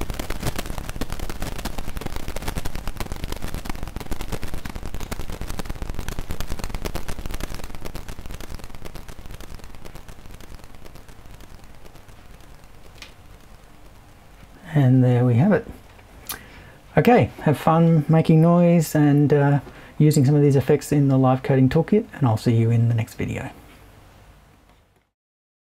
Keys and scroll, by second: 7.6 BackSpace.